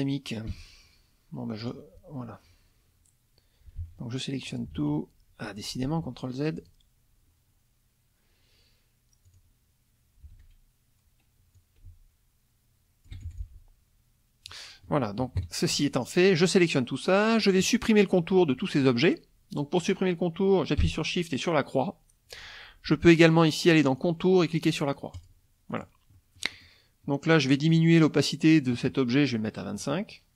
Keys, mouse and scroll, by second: 0.5 Escape, 1.6 click, 3.8 ctrl+z, 4.5 ctrl+click, 4.7 ctrl+a, 5.5 ctrl+click, 5.8 ctrl+z, 6.6 ctrl+click, 9.3 click, 10.3 ctrl+a, 11.6-13.3 alt+drag, 13.3 alt+F1, 13.4-14.7 alt+drag, 15.2 KP_Subtract, 16.4 click, 17.6 middle click, 23.9 click, 25.1 click, 25.7 click, 26.1 middle click, 26.1-26.8 scroll up 1, 27.7 click, 29.8 right click.